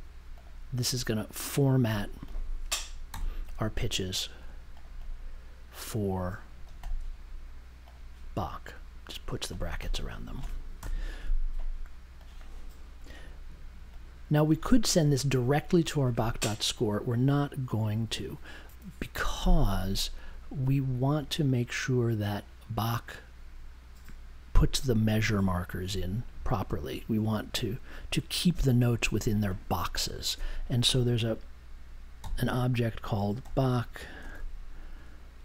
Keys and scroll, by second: 3.1 m, 10.7 BackSpace, 32.2 n, 33.4 b.